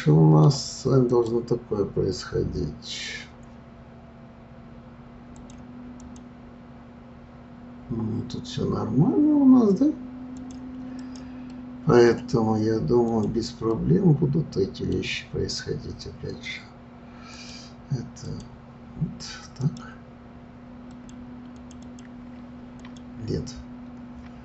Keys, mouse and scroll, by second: 1.1 click, 5.3-8.4 drag, 10.3 drag, 11.0 click, 11.5-13.1 middle drag, 13.1 click, 13.7-16.7 middle drag, 17.3-19.8 drag, 20.8 click, 21.5 click, 21.8 click, 22.8 click.